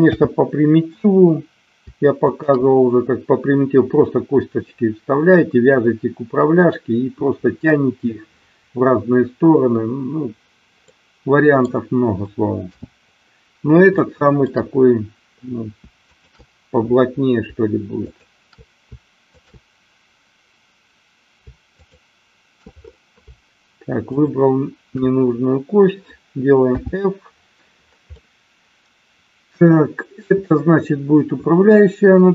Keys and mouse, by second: 0.1 f, 2.2 shift+click, 10.9 middle click, 12.7 f, 14.1 shift+middle click, 15.9 shift+click, 17.9 shift+click, 19.2 shift+click, 26.7 f, 28.2-30.3 middle drag.